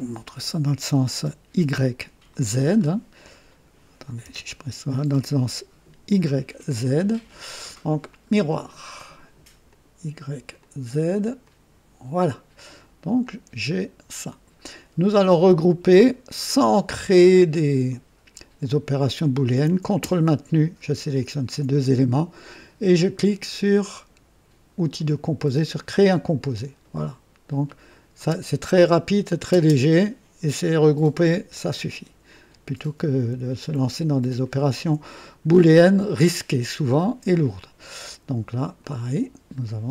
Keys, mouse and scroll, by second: 0.2 KP_3, 2.6-3.0 scroll down 1, 3.2-3.8 drag, 4.2 KP_0, 8.0 click, 9.6 click, 10.5 click, 11.4 click, 12.6 click, 13.2-14.8 drag, 15.4-15.9 drag, 18.6 click, 21.1 ctrl+click, 24.9 click, 25.9 click, 27.6 click, 28.1 space, 29.4 space, 32.2 click, 34.4 ctrl+click, 38.7 click.